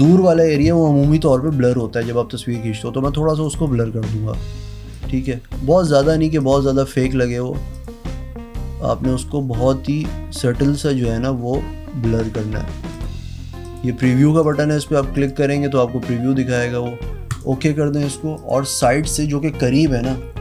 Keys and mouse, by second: 1.2 click, 1.9 click, 3.3 click, 4.8 click, 6.0 click, 6.3 click, 7.6 click, 12.9 click, 13.6 click, 14.4 click, 15.1 click, 17.2 click, 18.3 click, 18.8 e.